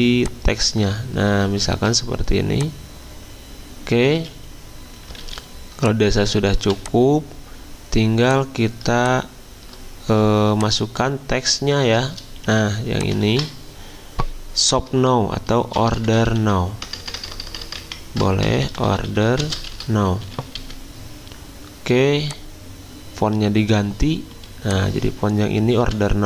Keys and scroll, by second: 4.2 z, 5.2 a, 6.6 v, 12.4 t, 13.3 ctrl+a, 15.5-20.8 typing, 17.8 Caps_Lock.